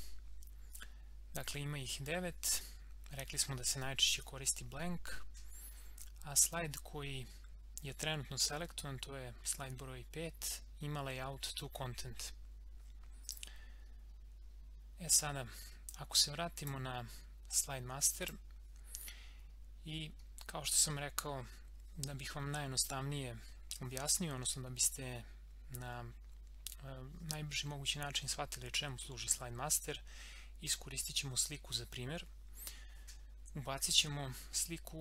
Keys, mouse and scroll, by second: 13.2 click, 13.9-15.8 scroll up 1, 16.6 click, 19.7 scroll up 1.